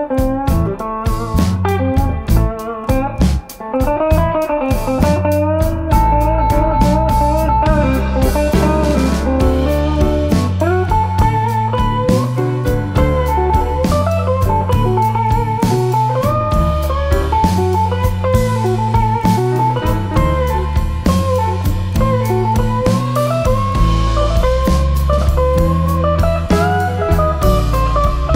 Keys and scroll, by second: 2.5 F1, 3.5 ctrl+d, 4.0 ctrl+*, 8.1 ctrl+g, 8.6 Home, 10.7 ctrl+g, 11.3 Home, 12.8 Home, 13.4 -, 14.6 space, 15.1 shift+F6, 22.7 F1, 23.6 ctrl+d, 24.3 ctrl+*, 25.7 Page_Down, 26.3 typing.